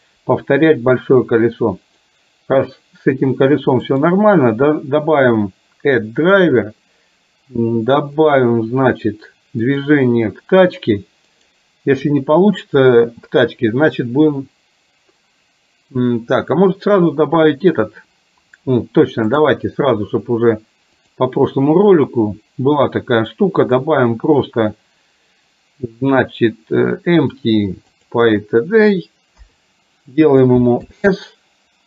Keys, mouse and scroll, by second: 4.0-10.0 right drag, 11.5-18.6 right drag, 19.5-21.2 right drag, 23.8-28.2 drag, 29.5 KP_3, 31.0 s.